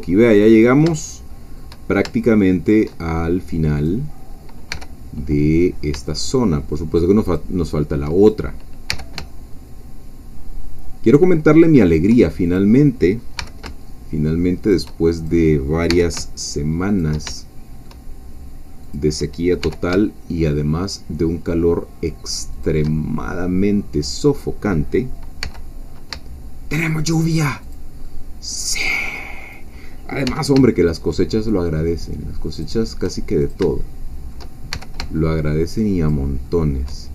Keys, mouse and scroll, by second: 0.5 click, 2.3-3.3 shift+middle drag, 3.9 click, 4.7 g, 7.3 shift+click, 8.3 shift+click, 8.9 g, 11.9 shift+click, 13.4 g, 14.6 shift+click, 15.3 shift+click, 15.9 g, 16.9 shift+click, 17.3 shift+middle click, 18.8 click, 19.6 g, 22.5 shift+click, 23.9 click, 25.4 g, 27.6 shift+click, 28.0-29.4 shift+middle drag, 29.5 click, 30.2 g, 32.5 shift+click, 33.4 shift+click, 33.8 shift+middle click, 34.7 shift+g, 36.0 shift+click, 36.5 shift+middle click.